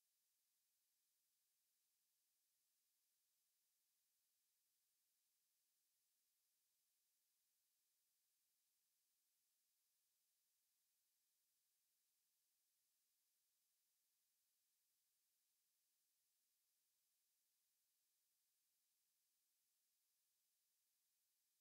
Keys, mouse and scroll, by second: 3.6 shift+a, 7.8 shift+a, 13.8-16.8 middle drag, 18.5 click, 18.6-21.6 middle drag.